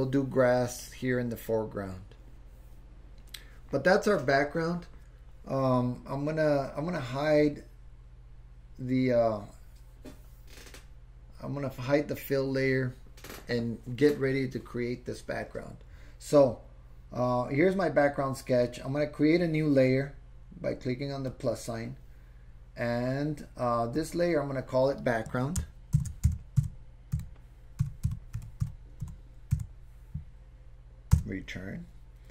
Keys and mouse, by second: 7.4 click, 21.3 click, 24.0 click, 24.1-32.3 drag.